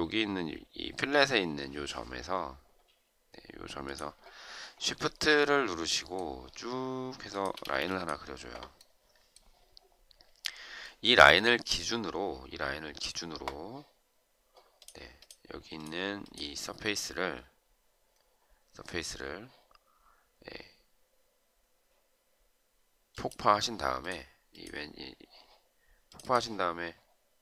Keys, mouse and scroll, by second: 5.2 shift+right click, 7.1 shift+click, 7.4 space.